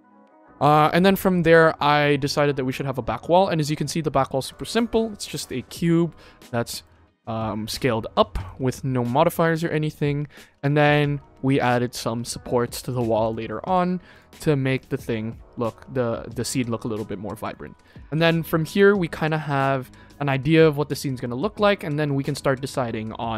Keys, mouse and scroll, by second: 0.0 n, 0.9-1.3 shift+middle drag, 2.2 click, 2.7 click, 3.3 middle drag, 3.9-4.2 shift+middle drag, 4.4 click, 4.9-5.2 scroll down 3, 5.4-5.9 middle drag, 6.3-6.7 middle drag, 7.7 middle click, 9.7 middle drag, 10.3 scroll up 2, 10.7-11.0 shift+middle drag, 11.6 click, 12.2 shift+middle drag, 12.7 click, 13.1 click, 13.6 click, 14.0 click, 15.7-16.2 shift+middle drag, 17.0 middle drag, 17.4 shift+middle drag, 18.2 ctrl+s, 18.6 shift+middle drag, 19.2 middle click.